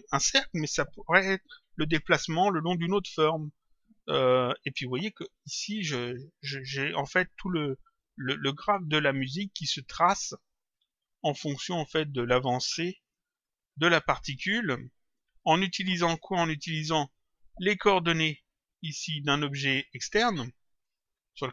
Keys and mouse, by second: 8.2 click, 11.5 click, 16.1 click, 18.7 click.